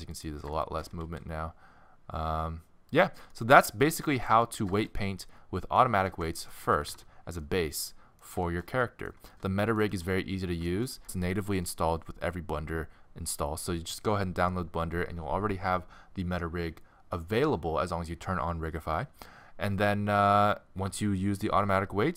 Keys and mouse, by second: 0.6-1.9 middle drag, 0.9 r, 3.8-6.1 middle drag, 6.1 ctrl+Tab, 6.6 z, 9.4-9.9 middle drag.